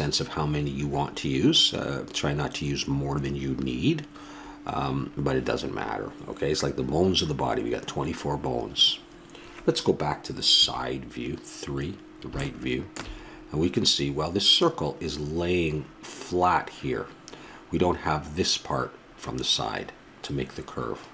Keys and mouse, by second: 10.5 KP_3, 14.1-17.8 middle drag.